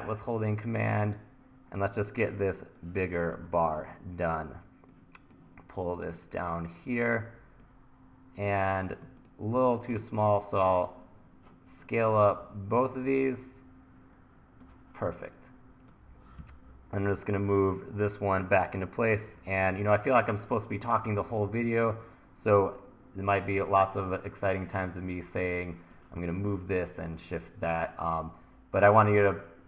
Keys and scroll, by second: 3.5 1, 10.7 t, 16.4 e, 23.6 1.